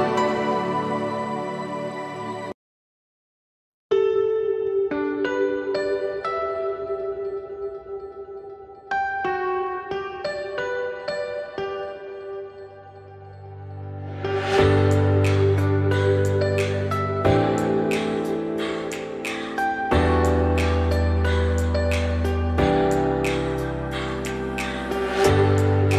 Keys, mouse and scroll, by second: 0.3-1.0 scroll down 12, 1.1-1.7 middle drag, 1.7 click, 2.7-3.9 drag, 6.5 `, 7.4 x, 8.4 z, 9.9 scroll down 1, 9.9-12.9 shift+middle drag, 12.9 z, 13.7-14.1 scroll up 2, 14.1 z, 14.7-15.0 scroll down 5, 15.0 shift+middle drag, 15.2-15.9 scroll up 2, 15.9 shift+middle drag, 16.1-16.7 scroll up 1, 16.7 click, 17.4 click, 18.3-20.4 drag, 21.5-23.9 drag, 25.0-25.9 drag.